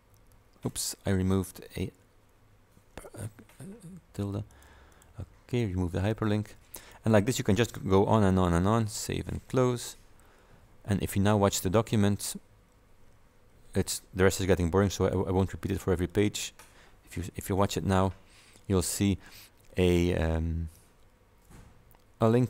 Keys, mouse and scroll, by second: 0.4 ctrl+v, 4.6 click, 5.0 click, 6.9 click, 9.0 click, 15.1 click, 16.2 click, 17.6 F5, 21.0-21.6 scroll down 2.